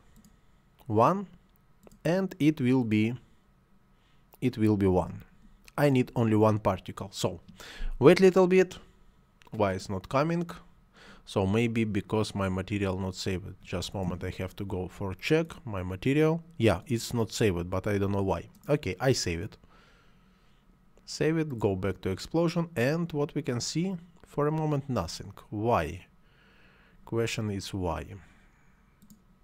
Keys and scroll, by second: 4.9 1.